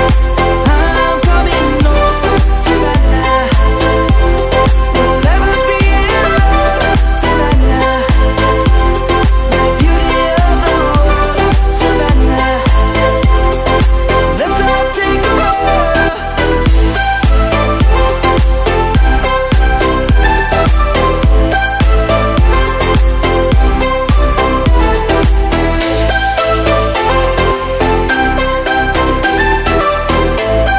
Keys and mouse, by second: 0.6 click, 2.4 Delete, 3.3 middle click, 5.3 1, 6.1 shift+middle click, 7.4 ctrl+7, 8.7 shift+middle click, 11.5 click, 11.7 Tab, 12.2 click, 13.7 middle click, 15.9 click, 17.5 3, 17.7 click, 18.6 shift+click, 19.0 shift+click, 19.5 shift+click, 21.7 ctrl+z, 22.4 shift+click, 23.9 i, 26.0 middle click, 27.8 e.